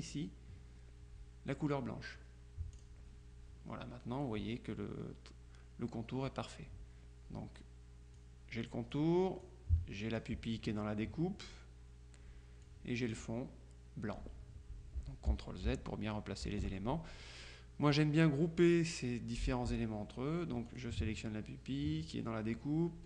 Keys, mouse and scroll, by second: 2.8 click, 8.2 click, 12.7 click, 15.4 ctrl+z, 16.5 z, 18.0 click, 20.8 click.